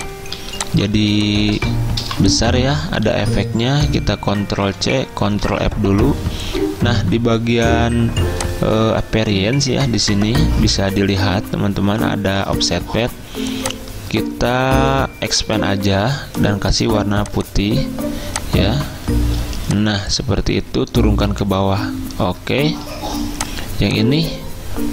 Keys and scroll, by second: 0.4 z, 2.0 v, 3.1 ctrl+z, 4.6 ctrl+c, 5.5 ctrl+f, 21.4 ctrl+[, 21.9 ctrl+[.